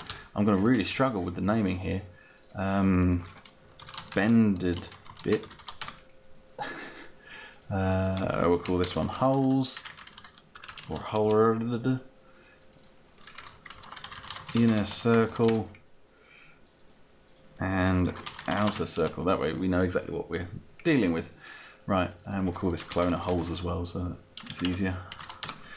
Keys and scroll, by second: 0.0-0.4 typing, 0.6 Return, 3.5-6.0 typing, 6.5 Return, 8.5-11.2 typing, 13.2-15.7 typing, 17.6-19.0 typing, 22.5-25.0 typing, 25.4 Return.